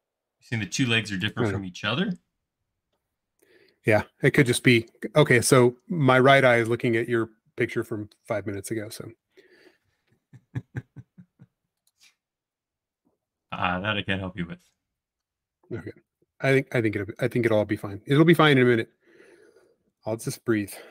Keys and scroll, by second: 4.9 m, 10.3 space.